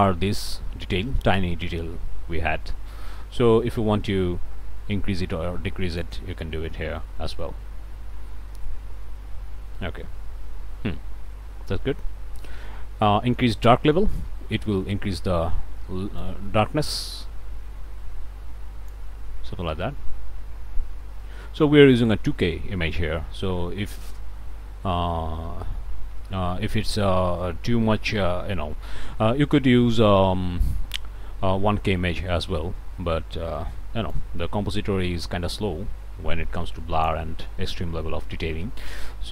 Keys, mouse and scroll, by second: 3.7-6.2 drag, 9.8-10.4 scroll down 1, 11.3 scroll up 1, 12.6 scroll down 1, 13.0-14.1 drag, 16.2-37.3 drag.